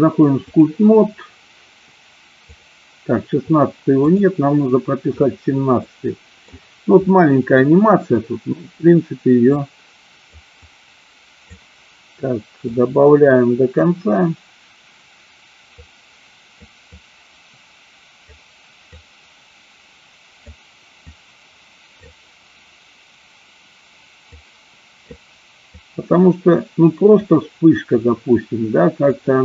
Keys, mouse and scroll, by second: 2.5 click, 4.1 click, 5.8 middle click, 7.1 middle click, 9.6 click, 10.7 click, 12.7-13.9 drag, 16.0 click, 17.1-18.4 drag, 19.2-20.7 drag, 21.2 click, 24.4 click, 25.8-27.3 drag, 29.2-29.4 drag.